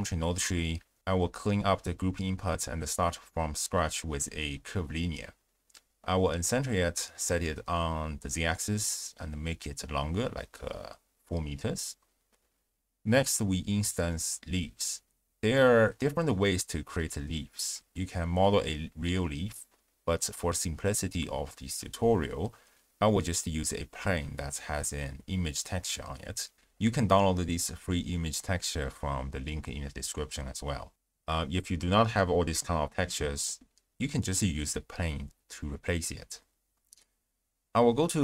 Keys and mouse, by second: 0.0 click, 0.7 click, 1.2 x, 1.7 ctrl+a, 5.4 click, 6.1 alt+shift+click, 6.8 click, 7.5 click, 8.4-9.0 drag, 9.9 click, 13.9 ctrl+alt+shift+w, 14.1 ctrl+alt+shift+q, 19.0 click, 19.8 click, 20.6 click, 22.5 z, 23.5-23.8 drag.